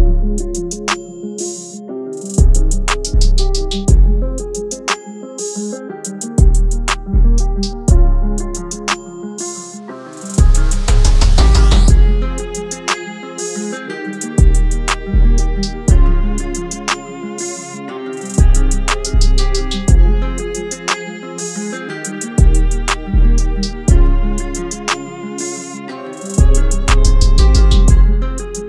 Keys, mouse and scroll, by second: 1.5 shift+Tab, 4.7-20.6 drag, 21.8-24.3 drag, 27.6 click.